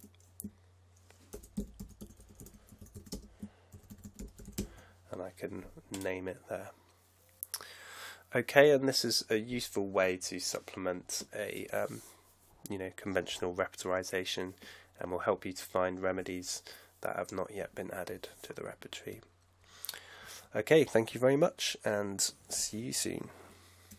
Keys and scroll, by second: 1.3-5.3 typing.